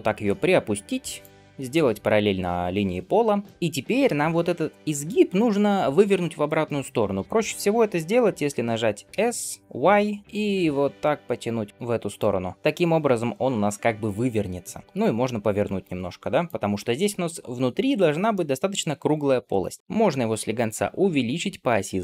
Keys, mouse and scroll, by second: 1.4-3.2 middle drag, 3.3 shift+middle click, 12.5 middle click, 18.2-19.8 middle drag.